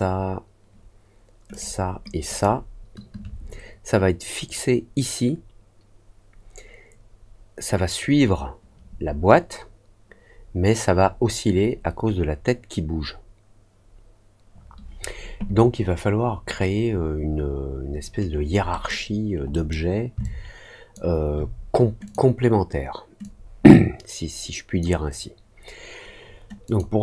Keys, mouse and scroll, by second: 1.4 shift+click, 2.2 shift+click, 18.6 middle click, 19.5 middle click, 20.2 alt+click, 22.0 click, 23.1-24.7 drag, 26.6 click.